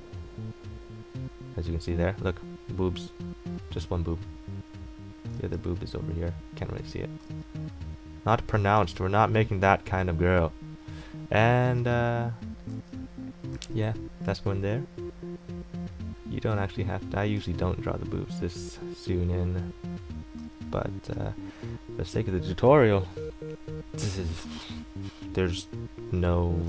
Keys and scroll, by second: 5.5 ctrl+z, 7.4 ctrl+z, 12.9 ctrl+z, 17.6 ctrl+z, 20.6 ctrl+z.